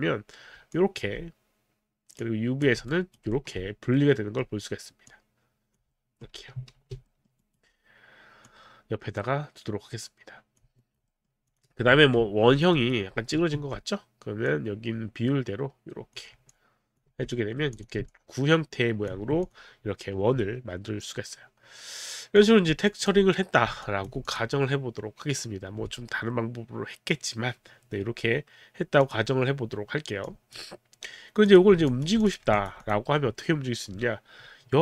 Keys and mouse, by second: 0.7 alt+click, 2.3 click, 2.9 alt+right click, 3.4 alt+middle click, 4.0 middle click, 5.1 click, 6.1 alt+middle click, 6.7 ctrl+z, 7.1 alt+middle click, 7.5 alt+right click, 8.5 click, 10.8 alt+right click, 11.1 alt+middle click, 11.4 alt+click, 12.5 alt+click, 12.8 alt+right click, 12.8 alt+click, 13.5 r, 14.5 click, 16.5 alt+click, 17.1 alt+click, 17.1 q, 17.3 right click, 17.8 click, 18.1 alt+click, 19.4 click, 22.4 click, 23.8 alt+click, 24.2 click, 24.8 click, 29.0 click, 30.2 click, 31.5 click, 31.9 alt+click, 32.4 alt+click, 32.5 alt+click, 32.8 alt+click.